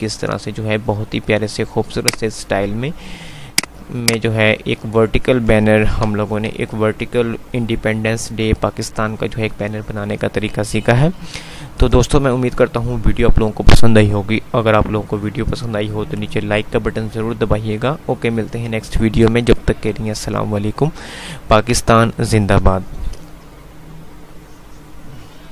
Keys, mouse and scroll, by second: 2.0 right click, 3.7-4.9 drag, 5.9 F2, 6.7 F9, 23.4 F10.